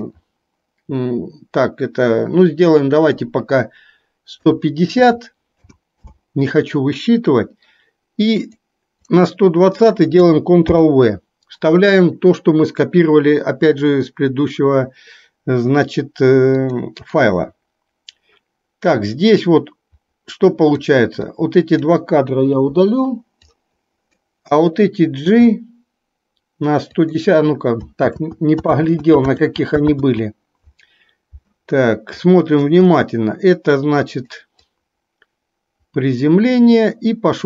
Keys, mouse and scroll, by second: 16.7-25.5 drag, 25.5 g, 28.2 ctrl+z, 29.0 ctrl+z, 29.4 ctrl+z, 30.2 ctrl+z, 34.7-37.4 drag.